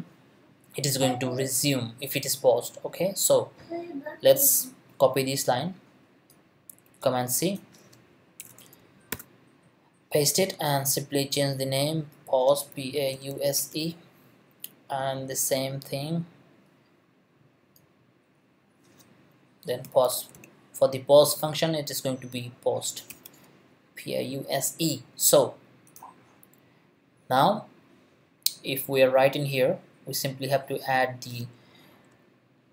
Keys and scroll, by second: 6.9 super+c, 8.4 Return, 9.1 super+v, 12.7-14.1 typing, 19.6-20.8 typing, 22.8 s, 23.1 e.